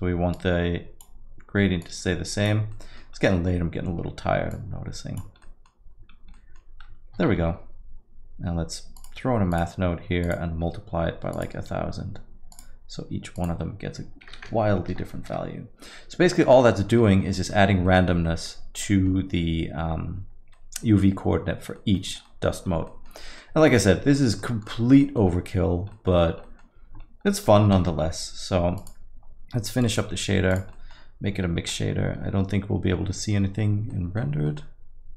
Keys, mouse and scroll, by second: 0.4 click, 1.9 click, 2.9 middle click, 3.2 scroll up 1, 4.6 click, 4.6 scroll up 6, 5.5 middle click, 6.2-6.6 scroll up 2, 6.5 middle click, 7.3 shift+a, 10.2 click, 11.3 click, 14.5 click, 14.5 KP_0, 16.6 middle click, 17.1 alt+middle click, 17.4 middle click, 17.7-18.1 scroll up 3, 17.9 middle click, 18.3 middle click, 18.5 alt+middle click, 18.5 scroll down 2, 18.9 middle click, 19.1-19.9 scroll down 2, 19.9-20.4 scroll up 3, 20.6 middle click, 21.8 middle click, 22.1 scroll down 2, 22.3 alt+middle click, 22.3 alt+middle click, 22.7 scroll up 1, 22.9 middle click, 23.4 middle click, 23.6 scroll down 1, 24.4 middle click, 24.4-25.3 scroll down 8, 25.0 middle click, 25.7-26.6 scroll up 5, 25.9 middle click, 26.4 middle click, 27.0 scroll up 2, 27.3 middle click, 27.8 shift+a, 30.7 middle click, 30.7 scroll up 1, 31.6 z, 33.9 middle click, 34.5 middle click.